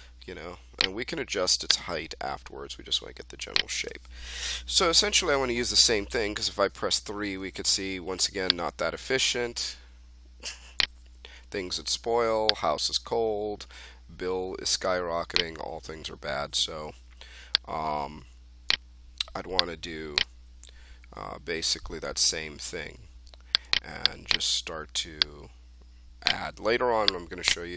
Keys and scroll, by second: 6.8 3, 15.8 1.